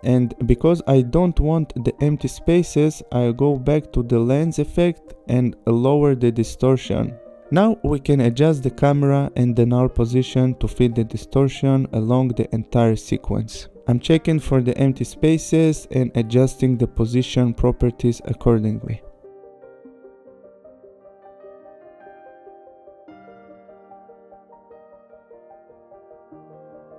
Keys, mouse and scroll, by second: 4.0 click, 5.0 click, 5.3 shift+Down, 5.8 Up, 7.4 click, 10.1 click, 10.9 click, 14.6 click, 16.8 click, 18.4 click, 21.2 click, 25.3 click, 26.7 click.